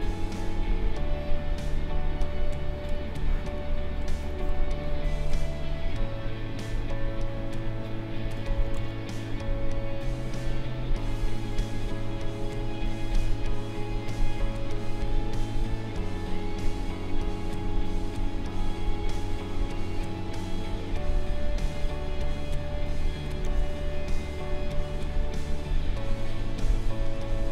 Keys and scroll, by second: 2.9 space, 8.7 ctrl+z, 23.4 ctrl+z.